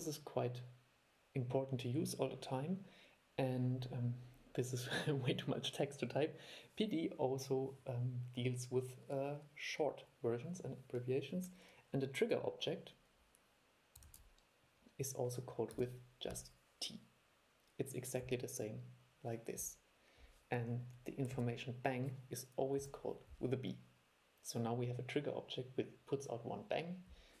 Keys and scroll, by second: 14.2 super+1.